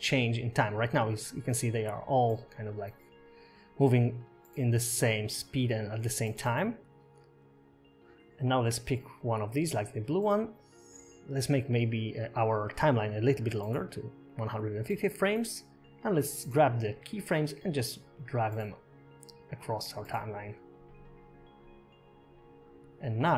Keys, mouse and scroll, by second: 0.3 scroll up 1, 0.6 scroll down 2, 0.8 space, 5.5 space, 6.4 space, 8.2 space, 9.9 click, 14.5 click, 17.4 click, 20.1 click, 23.2 click.